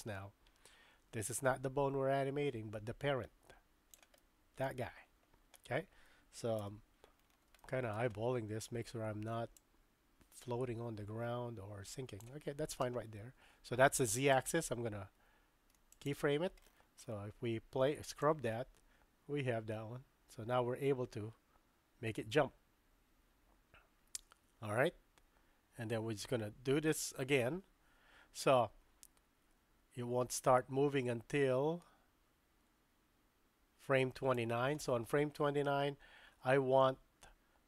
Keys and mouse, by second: 4.2-4.7 middle drag, 6.6 KP_3, 7.6-7.9 shift+middle drag, 9.5-12.2 drag, 14.4-16.1 right drag, 18.2-34.4 drag.